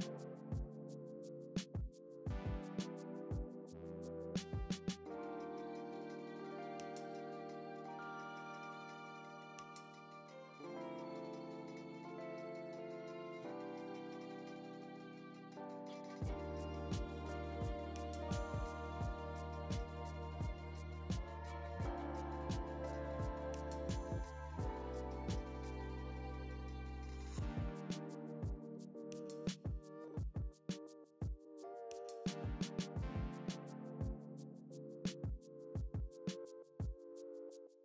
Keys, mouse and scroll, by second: 0.7 click, 1.6-1.9 scroll down 1, 2.3 alt+d, 3.2 click, 3.3 ctrl+m, 4.1 scroll down 1, 4.2 `, 4.8 KP_0, 5.0-5.4 scroll up 1, 5.4 g, 6.8 click, 7.7 g, 8.4 alt+d, 8.5 click, 8.6 g, 9.6 click, 10.2 shift+s, 10.4 click, 11.1 ., 11.3 r, 13.0 alt+a, 13.1 scroll down 1, 13.9 click, 14.3 alt+d, 14.4 click, 14.5 r, 16.0 ctrl+m, 17.1 r, 17.4 ctrl+z, 18.2 r, 21.1-21.6 scroll down 2, 21.2 `, 21.6 g, 22.2 click, 22.4 s, 24.1 ., 24.4 s, 24.8 click, 25.1-25.6 scroll up 1, 25.6 g, 26.4 click, 26.8 g, 27.5 click, 27.6 a, 27.9 click, 29.1 alt+d, 29.6 ., 29.8 r, 31.2 click, 31.3 s, 32.0 alt+a, 32.6 click, 32.8 a, 33.6 click, 34.0 x.